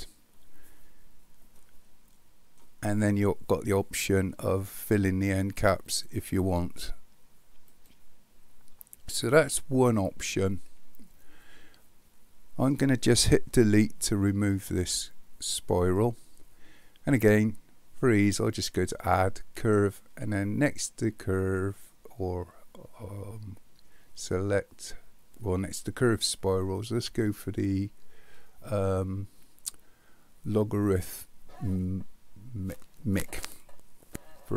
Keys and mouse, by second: 1.6-2.6 middle drag, 7.8 click, 14.8 Delete, 18.6-33.7 drag.